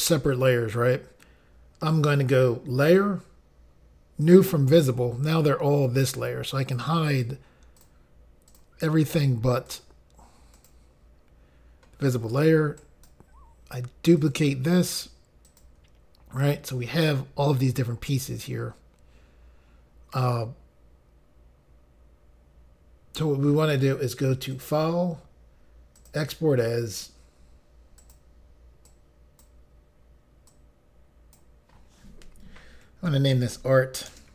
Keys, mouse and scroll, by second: 2.9 click, 4.3 click, 6.7 click, 7.2 click, 7.3 double click, 7.9 double click, 8.6 double click, 8.7 double click, 9.2 click, 9.8 click, 10.7 click, 12.9 right click, 14.3 click, 15.6 click, 15.7 click, 24.7 click, 26.1 click, 28.1 click, 29.0 click, 30.6 click, 33.0 typing, 34.2-34.3 typing.